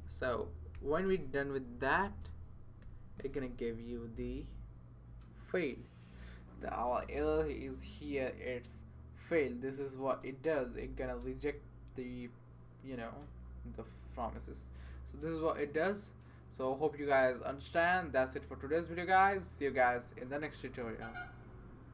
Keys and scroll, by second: 0.3 Down, 1.1 Return, 1.8 Right, 2.8 typing.